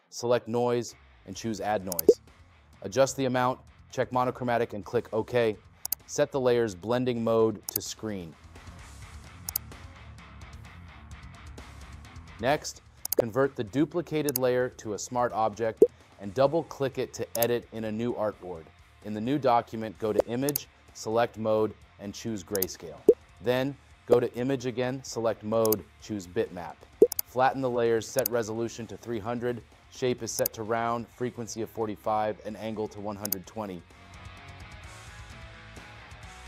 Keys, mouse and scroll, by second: 11.1 space.